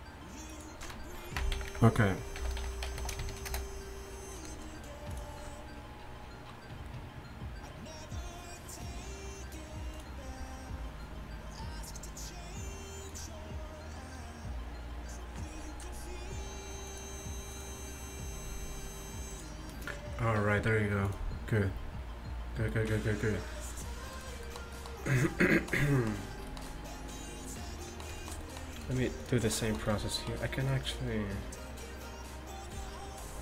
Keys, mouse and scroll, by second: 28.8-31.0 right drag, 31.5-32.6 middle drag.